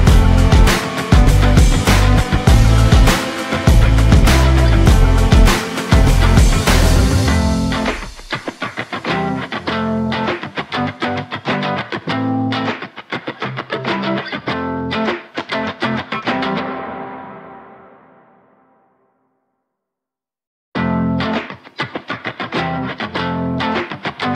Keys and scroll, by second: 3.7 ctrl+z, 6.6 ctrl+y, 8.3 ctrl+shift+y.